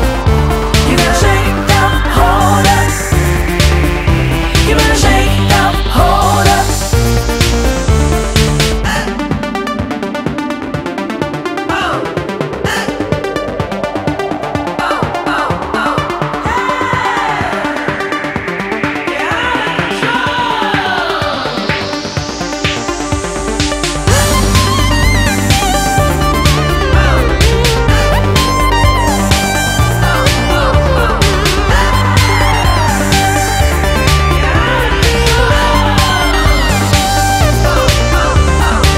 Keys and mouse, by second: 0.0-1.9 typing, 3.1 click, 4.4 click, 5.5 click, 5.7 double click, 5.8 click, 6.0 double click, 6.0 click, 6.4 double click, 11.3 click, 12.4 click, 12.5 click, 14.3 click, 18.7 click, 28.8 click, 34.9 click, 36.7 click, 36.8 double click, 37.6 click.